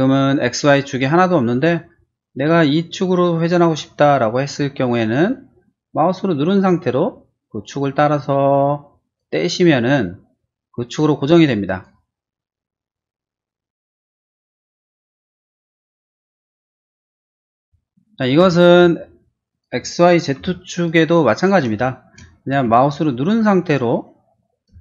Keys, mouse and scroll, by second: 2.0 middle click, 4.5 middle click, 6.9-9.1 drag, 10.0 middle click, 11.6 click, 14.0 click, 14.3 middle click, 15.1 middle click, 15.7 space, 16.6 click, 17.0 Delete, 17.3 click, 17.5 Delete, 18.4 r, 18.6 click, 19.5 click, 20.4 p, 20.7 click, 21.3 click, 21.8 middle click, 22.4 shift+q, 23.1 click, 24.7 space.